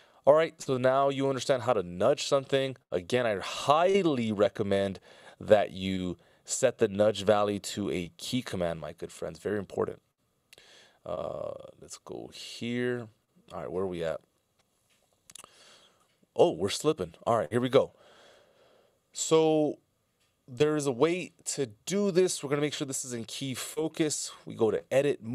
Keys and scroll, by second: 18.1 F16.